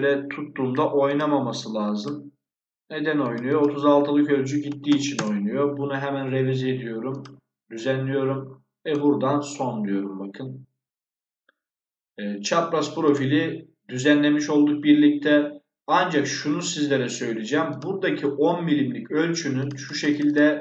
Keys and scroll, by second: 4.6 3, 4.8 6, 5.0 Return.